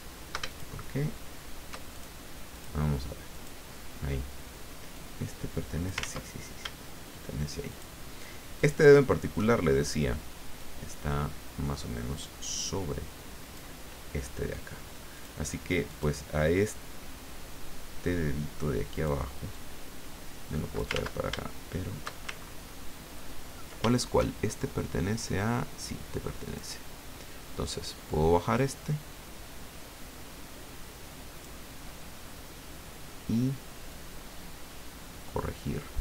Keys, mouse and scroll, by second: 0.5 shift+click, 1.9 shift+click, 2.5 click, 3.3 click, 4.9-6.0 drag, 6.0 ctrl+z, 7.7 shift+click, 8.5 shift+click, 10.6-13.6 drag, 15.1 click, 15.9 click, 18.9 click, 19.5-21.0 drag, 21.0 ctrl+z, 22.4-22.8 ctrl+shift+scroll up 3, 23.2 ctrl+scroll up 2, 24.6-26.8 shift+drag, 28.5-31.8 drag, 33.9-36.0 drag.